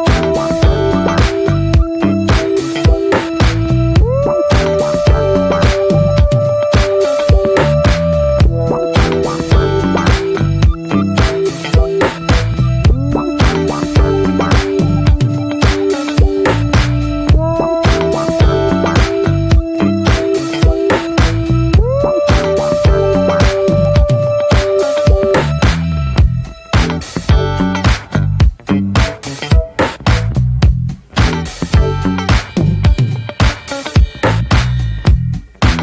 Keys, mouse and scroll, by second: 0.6-3.7 drag, 8.6 click, 9.1 scroll down 2, 9.3 scroll up 1, 9.9-14.4 drag, 14.4-14.8 scroll up 2, 14.8-15.3 scroll down 1, 15.3-16.3 scroll down 1, 16.3-17.0 scroll down 1, 17.0-18.7 drag, 18.7 scroll down 1, 18.9 scroll up 2, 19.1-25.8 shift+middle drag, 25.8-30.0 drag, 30.0 ctrl+z, 30.9-34.0 drag, 34.0-35.2 shift+middle drag, 35.2 click, 35.6 ctrl+z.